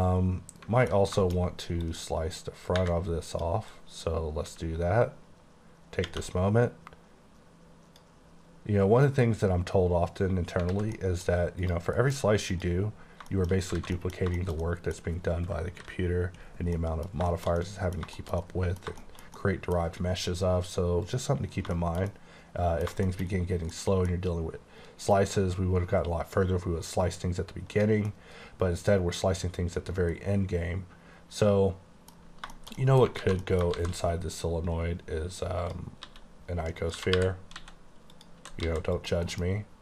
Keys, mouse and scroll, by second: 1.2 shift+middle click, 1.5 scroll up 2, 1.9 click, 3.8 click, 4.5 x, 6.1 space, 10.7 space, 10.8 alt+a, 11.0 middle click, 11.7 click, 12.0 alt+m, 12.6 click, 13.3 shift+click, 13.4 shift+middle click, 13.6 scroll down 2, 13.8 alt+a, 14.0 middle click, 14.2 scroll down 1, 14.4 shift+middle click, 15.8 KP_5, 16.7 middle click, 18.0 scroll down 1, 18.2 shift+middle click, 18.5 middle click, 19.2 shift+scroll up 1, 19.3 scroll down 1, 19.4 middle click, 21.1 click, 21.8 shift+middle click, 27.8 click, 28.2 middle click, 33.3 alt+a, 33.5 middle click, 33.8 shift+a, 34.5 click, 36.1-37.6 typing, 36.9 click, 38.2 click, 38.7 s, 39.0 click, 39.3 m.